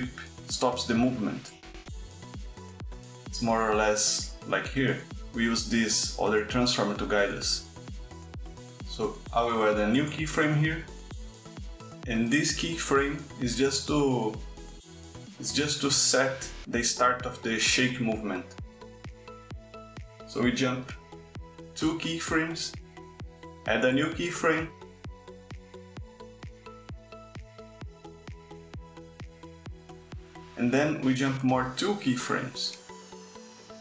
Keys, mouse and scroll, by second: 1.2 click, 1.7 click, 8.8 click, 10.9 click, 23.7 Right, 23.9 Right, 25.0 click.